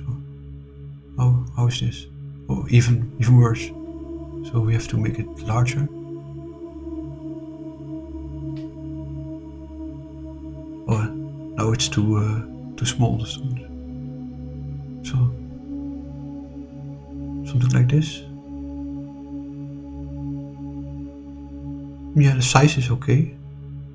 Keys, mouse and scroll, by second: 1.4 click, 4.0 click, 5.0-8.4 drag, 9.6 click, 12.8 click, 13.7-17.0 drag, 20.0 click, 22.7 click.